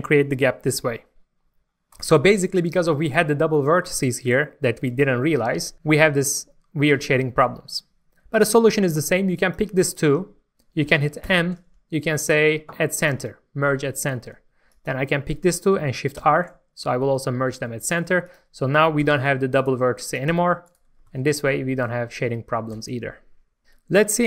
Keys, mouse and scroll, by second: 1.9 right click, 3.0-4.2 middle drag, 9.3-10.4 drag, 11.2 m, 13.0 click, 16.2 shift+r, 17.5 alt+a, 18.2 click, 19.0 g, 19.5 right click, 20.1 click, 20.3 g, 20.7 right click, 20.9 scroll down 1, 21.0 Tab, 21.5 middle click.